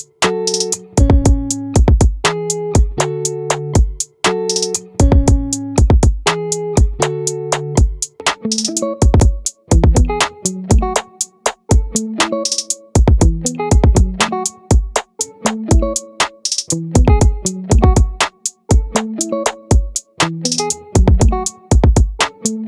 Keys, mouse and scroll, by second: 1.4-4.4 drag, 4.4 ctrl+r, 7.2-12.0 right drag, 19.6-21.2 drag.